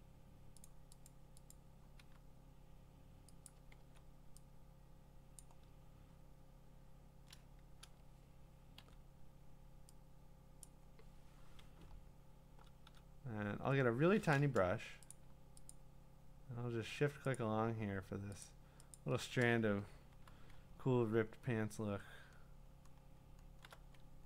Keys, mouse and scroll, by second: 0.7 click, 1.1 click, 1.5 click, 2.0 q, 3.5 click, 3.8 x, 5.4 click, 8.8 x, 10.6 click, 12.0-12.7 [, 12.9 [, 15.2 click, 15.7 shift+click, 17.4 click, 18.4 shift+click, 19.0 shift+click, 20.6-23.1 scroll, 23.2 scroll down 10, 23.5-23.9 scroll.